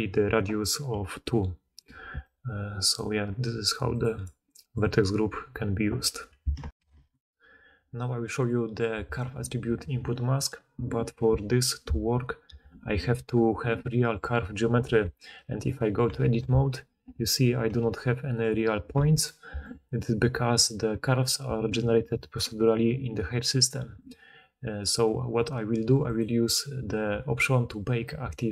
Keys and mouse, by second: 0.8-2.9 typing, 6.7 ctrl+alt+Insert, 6.8 ctrl+alt+Insert, 14.7 Tab, 16.0 a, 17.6 g, 18.3-28.5 drag, 18.9 Tab.